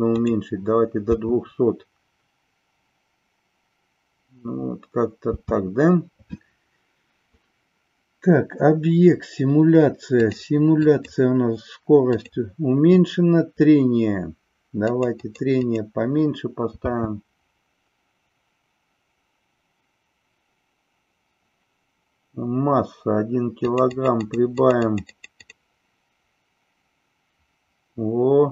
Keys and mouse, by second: 0.1 click, 1.0 space, 5.3 space, 10.9 click, 12.1 click, 14.9 click, 15.1 click, 15.7 click, 16.9 space, 23.7 click, 24.1 click, 24.5 click, 25.3 click.